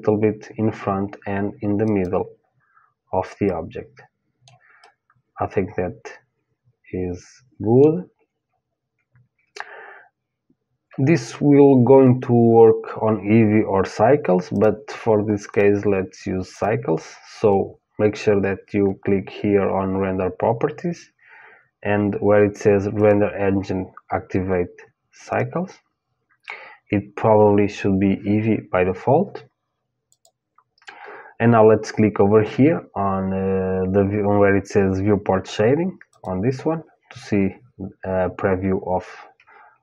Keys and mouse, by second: 3.1-6.6 middle drag, 14.1-17.1 drag, 22.6-25.0 drag, 29.7-31.8 drag, 36.3-37.7 drag.